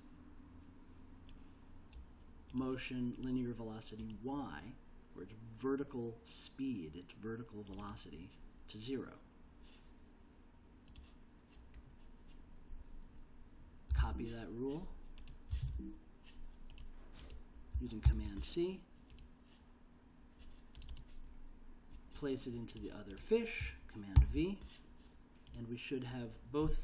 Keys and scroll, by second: 14.1 super+c, 15.8 super+c, 18.2 super+c, 24.3 super+v.